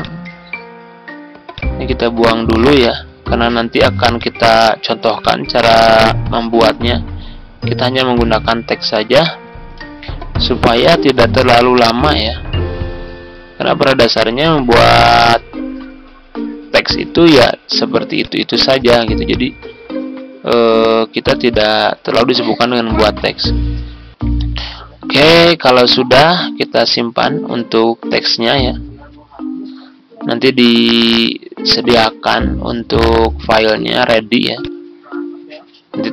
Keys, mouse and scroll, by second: 9.4 ctrl+g, 12.2 ctrl+z, 13.8-15.8 drag, 18.1 shift+click, 20.5 ctrl+c, 21.4 Tab, 22.6 ctrl+v, 24.4 ctrl+g, 25.9 scroll down 1, 26.4-27.2 scroll up 1, 27.2-28.3 scroll down 1, 28.3-30.0 scroll up 1, 33.6-34.5 scroll down 1, 34.5-36.1 drag.